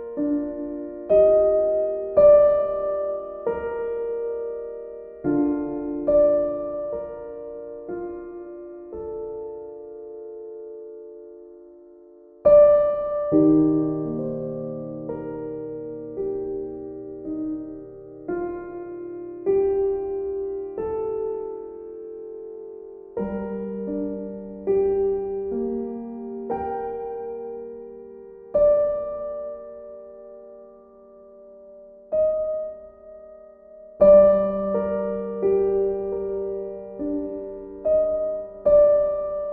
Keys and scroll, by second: 27.8 ctrl+u.